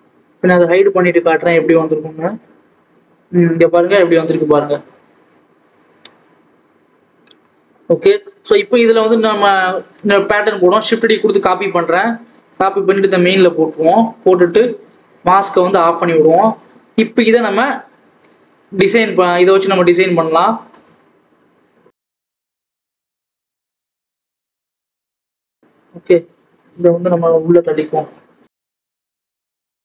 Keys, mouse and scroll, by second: 1.6 click, 2.0-2.5 scroll up 1, 2.9 click, 8.9 click, 10.2 shift+d, 12.5 click, 15.3 click, 15.7-16.1 scroll up 1, 16.1 click, 16.3-16.9 scroll down 1, 16.9-17.3 scroll up 1, 17.3 click, 17.5 Tab, 18.5-19.4 scroll down 2, 19.4 click, 20.2 s, 22.9 scroll up 1, 23.1 click, 23.7 click, 24.9 click, 25.3 2, 25.4 click, 25.9 ctrl+b, 27.0 3, 27.2 click, 27.5 g, 28.9-29.3 scroll up 1, 29.3 click, 29.6 scroll up 2.